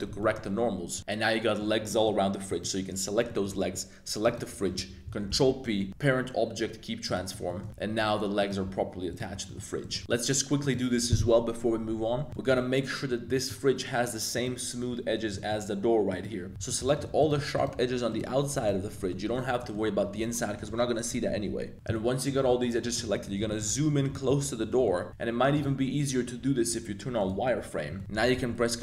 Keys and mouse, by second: 0.1 shift+drag, 0.9 a, 1.0-1.6 middle drag, 1.8 middle click, 2.4 click, 3.2 middle click, 4.2 shift+click, 5.3 super+p, 7.5 middle click, 8.1 a, 8.4 click, 8.6 g, 9.4 middle click, 9.8 click, 10.0 Tab, 10.0 super+s, 10.0 middle click, 10.6 click, 12.3 shift+middle drag, 12.8 middle drag, 13.3 shift+middle drag, 14.3 right click, 15.3 shift+middle click, 16.1 right click, 16.4 Tab, 18.8 z, 18.9 middle click, 19.3 middle click, 19.6 middle click, 21.3 z, 21.5 middle click, 21.7 z, 21.9 middle click, 22.6 middle click, 22.6 z, 22.8 middle click, 23.2 z, 23.4 shift+middle click, 24.1 shift+middle click, 24.6 shift+middle click, 25.5-27.7 drag, 28.0 shift+click, 28.3 super+b.